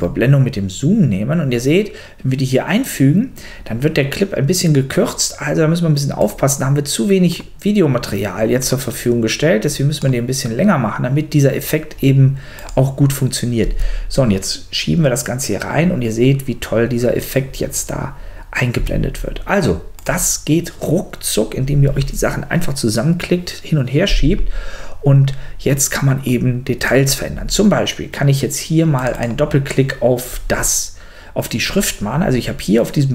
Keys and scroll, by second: 13.6 space, 18.7 space.